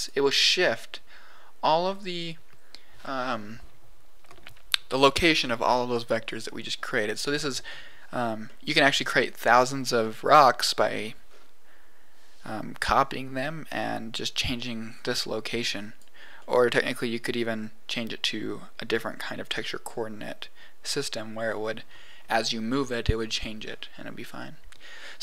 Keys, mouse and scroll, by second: 8.1 scroll down 2, 8.4 middle click, 9.0 scroll down 2, 11.2 scroll up 4, 13.6 click, 14.9 click, 15.7 click, 16.4 middle click, 19.8-20.2 scroll down 2.